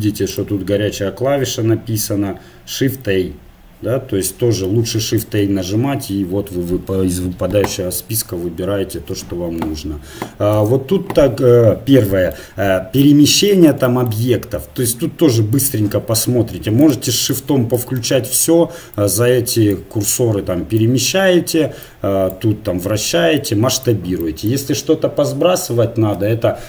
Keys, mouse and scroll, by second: 0.3-2.3 drag, 5.2 shift+a, 9.0 t, 10.6 n, 12.1-14.0 middle drag, 16.8-18.0 drag, 18.0-19.9 middle drag, 19.9-26.6 drag.